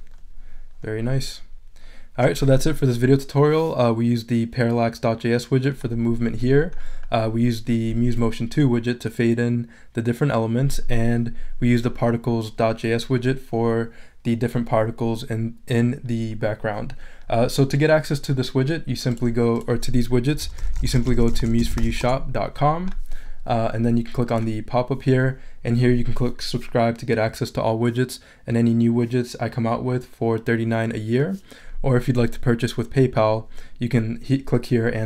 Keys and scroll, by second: 20.2-22.3 typing.